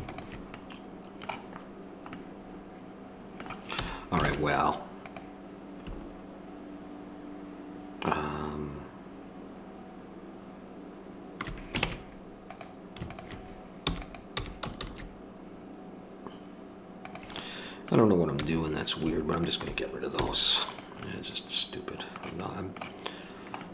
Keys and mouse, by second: 1.7-3.8 drag, 3.8 a, 4.3 ctrl+Tab, 11.8 ctrl+Tab, 13.1-14.6 drag, 13.8 e, 18.4 a, 20.2 x.